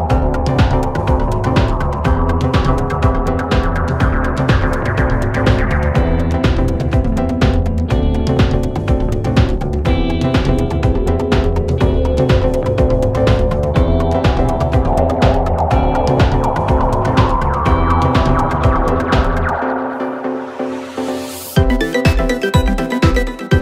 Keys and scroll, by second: 1.2 3, 4.2 4, 7.1 F1, 9.2 ..